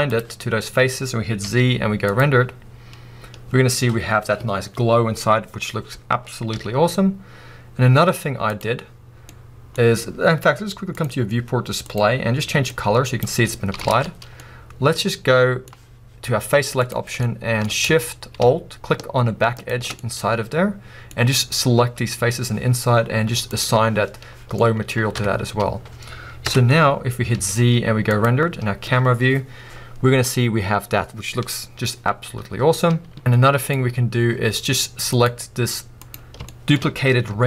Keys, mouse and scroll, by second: 0.2-9.3 drag, 2.2 z, 4.8 z, 8.1 z, 9.3-12.7 middle drag, 12.7 click, 13.5-16.9 middle drag, 13.9 alt+a, 14.3 scroll up 2, 16.9 click, 17.2-19.7 shift+middle drag, 19.7 alt+shift+click, 20.1-23.6 middle drag, 23.6 click, 24.6 middle click, 25.2 Tab, 25.3 scroll down 2, 26.5 KP_0, 27.8-28.6 middle drag, 28.3 z, 33.2 z, 33.3-34.3 middle drag, 34.3 scroll up 2, 34.5-35.3 middle drag, 35.3 click, 36.6 shift+middle drag, 36.9-37.3 scroll up 2, 37.3 g.